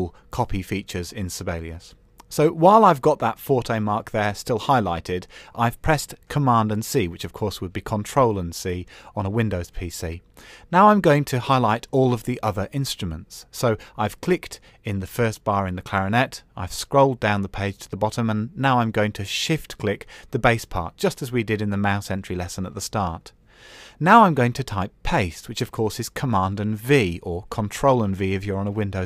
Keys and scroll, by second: 26.5 super+v.